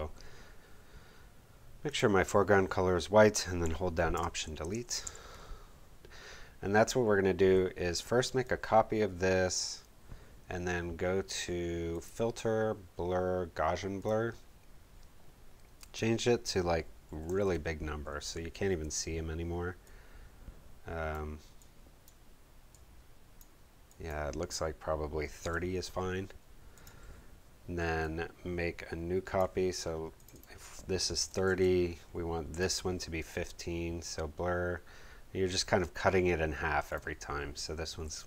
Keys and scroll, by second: 0.2 d, 4.1 alt+BackSpace, 4.6 alt+super+BackSpace, 4.7 alt+super+d, 5.0 super+v, 5.9 v, 16.8-17.7 typing, 18.1 Tab, 25.1-25.9 typing, 30.9-31.8 typing, 37.7-38.2 typing.